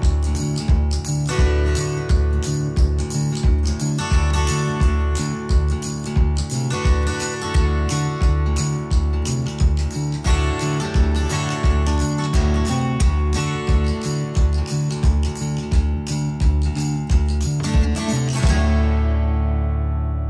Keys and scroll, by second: 5.6-6.9 typing, 10.2-11.0 typing, 12.1 x, 15.4-16.6 typing.